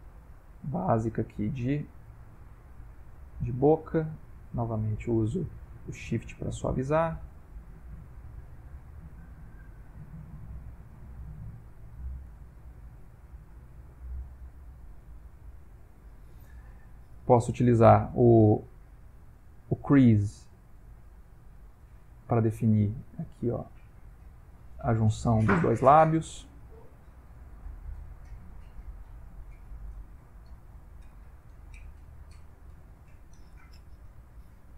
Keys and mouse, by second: 0.0 click, 0.6 click, 1.2 click, 1.3 click, 1.8 click, 2.4 click, 3.0 click, 4.3-5.3 shift+click, 4.9 shift+click, 5.5 click, 6.2 shift+click, 6.5 shift+click, 6.9 shift+click, 7.4 shift+click, 8.2 click, 8.7 click, 9.2 ctrl+middle click, 10.3 click, 10.6 click, 11.0 click, 11.6 click, 12.4 click, 12.9 click, 13.5 click, 14.1 click, 17.5 shift+space, 18.0 shift+space, 21.4 ctrl+middle click, 22.1 shift+middle click, 23.6 click, 24.2 click, 24.6 click, 24.9 click, 25.4 click, 25.7 click, 26.2 click, 26.7 click, 27.1 click, 27.4 click, 27.9 click, 28.7 click, 29.0 click, 29.9 click, 30.3 click, 30.8 click, 31.2 click, 31.5 click, 33.1 click, 34.5 click.